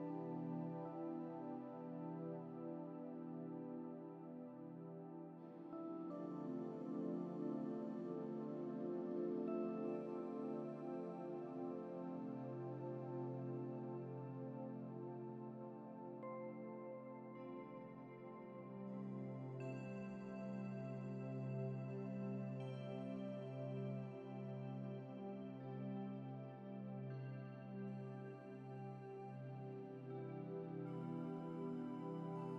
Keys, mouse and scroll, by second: 21.7 scroll up 1, 24.2-24.8 scroll up 1, 27.9-28.7 scroll down 1, 29.3 middle click, 32.1 scroll down 1.